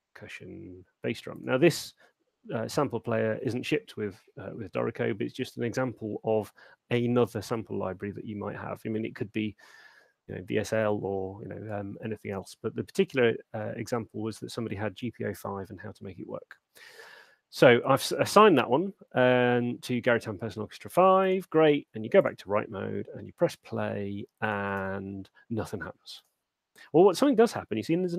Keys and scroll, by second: 24.8 alt+shift+space.